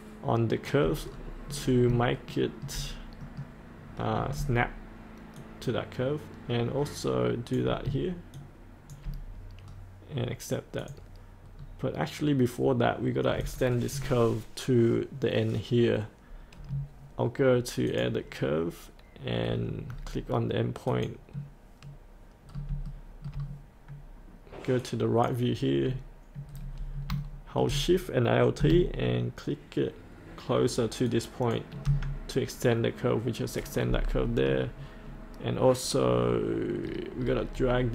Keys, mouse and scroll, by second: 1.1-1.9 scroll up 1, 2.3 shift+middle click, 3.2 middle click, 3.8-4.4 scroll down 1, 5.4-7.5 shift+drag, 8.3 shift+click, 9.6-10.8 scroll up 1, 10.8 click, 11.6-12.3 scroll up 1, 13.4 click, 16.6-17.9 scroll up 1, 17.9 click, 19.4-20.8 scroll down 1, 20.8 click, 22.5 scroll up 1, 22.8 shift+middle click, 24.8 click, 26.5-27.0 scroll down 1, 27.2 shift+middle click, 31.0 alt+shift+click, 33.3-35.0 scroll up 1, 36.8-37.9 scroll down 1.